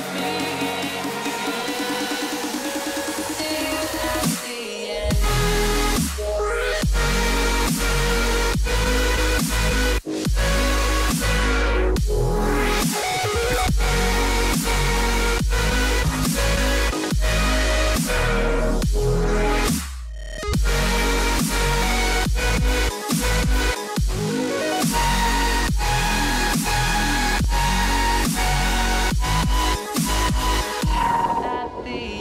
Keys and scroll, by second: 0.4 ctrl+space, 9.2 ctrl+alt+shift+e, 10.9 j, 27.4 j, 27.9 h, 29.4 j.